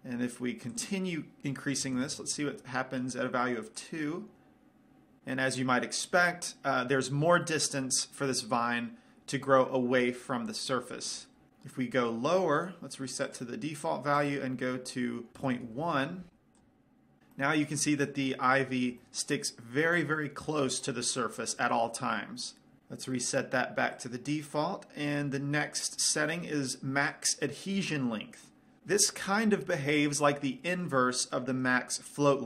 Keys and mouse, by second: 1.0-2.9 drag, 4.6 click, 12.9-15.3 right drag, 14.5 click, 17.0 click, 17.7-22.8 middle drag, 24.3-26.2 right drag, 29.3-32.4 middle drag.